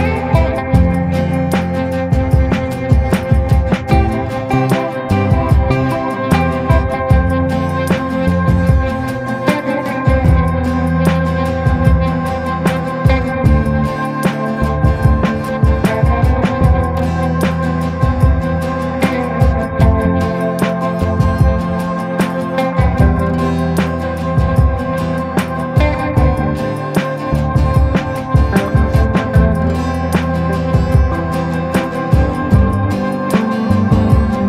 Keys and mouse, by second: 0.0 click, 2.1 click, 2.6 click, 3.3 ctrl+z, 3.4 ctrl+z, 3.8 click, 4.2 click, 4.8 ctrl+z, 5.2 click, 6.6-8.8 drag, 8.9 middle click, 9.5 shift+middle click, 13.4 click, 13.6 click, 14.9 click, 15.6 click, 16.1 click, 17.0 click, 18.1 click, 21.3 click, 23.9-24.2 ], 24.2 click, 25.0 ctrl+z, 25.9 click, 26.6 click, 27.0 ctrl+z, 28.8 middle click, 29.6 middle click, 30.2 shift+middle click, 31.8-32.4 [, 32.5 click, 33.2 ctrl+z, 33.5 click.